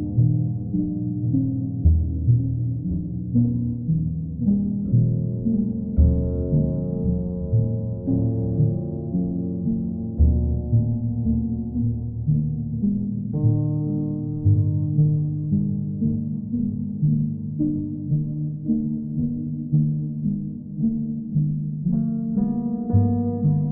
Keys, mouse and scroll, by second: 0.9 alt+click, 1.0 shift+click, 2.6 click, 3.8 click, 5.0 alt+click, 5.7 click, 6.2 click, 6.5 shift+click, 7.1 alt+click, 8.3 w, 10.0 alt+click, 10.6 click, 10.8 shift+click, 12.6 shift+click, 13.8 alt+click, 14.6 alt+click, 17.5 click, 18.3 alt+click, 23.0 click.